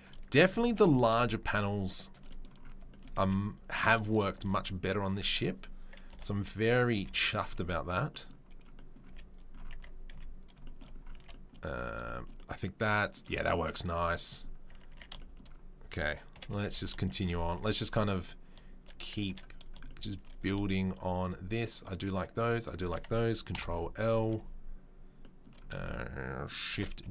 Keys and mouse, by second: 0.6 g, 3.2 z, 4.4 ctrl+r, 6.1 Delete, 6.9 z, 9.0 z, 9.7 Tab, 10.1 z, 11.1 Tab, 13.5 Tab, 14.6 Tab, 14.9 Tab, 16.3 KP_7, 16.6 Tab, 19.3 3, 19.5 click, 19.5 right click, 20.3 click, 20.3 right click, 21.2 right click, 21.3 middle click, 22.2 right click, 22.3 shift+middle click, 22.6 shift+right click, 22.7-27.1 shift+middle drag, 26.7 shift+d.